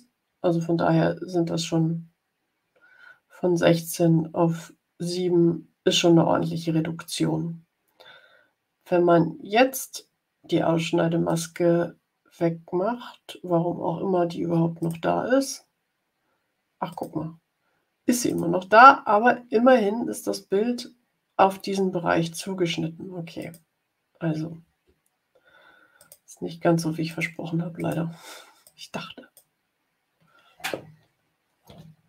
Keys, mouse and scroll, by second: 11.2 click, 14.7 click, 16.8 click, 18.2 click, 23.3 click, 25.9 shift+click, 27.0 click, 27.7 click, 28.5 click.